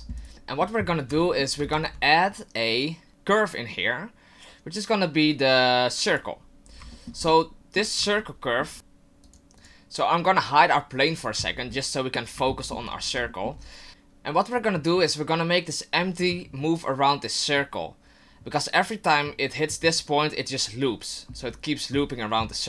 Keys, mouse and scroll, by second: 0.3 shift+middle click, 0.3 scroll down 4, 1.3 shift+middle click, 1.7 shift+a, 6.7 scroll down 2, 6.9 shift+middle click, 7.3 middle click, 8.2 shift+middle click, 8.9 click, 9.2 click, 9.6 click, 11.0 click, 11.7 middle click, 12.5 shift+middle click, 13.0-13.3 scroll down 2, 13.3 shift+middle click.